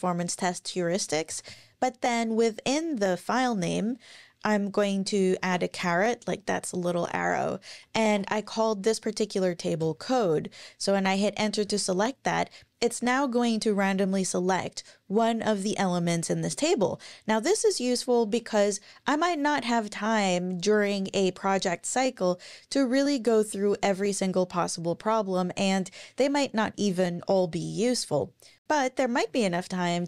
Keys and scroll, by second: 1.3 Left, 1.4 Left, 5.4 shift+6, 7.6-8.6 typing, 9.8 Return, 11.6 Down.